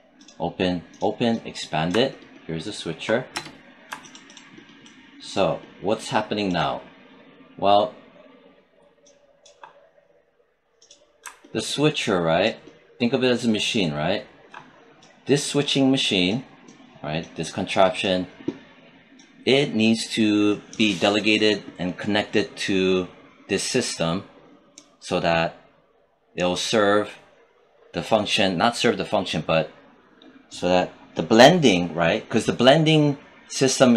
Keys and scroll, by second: 3.4 space.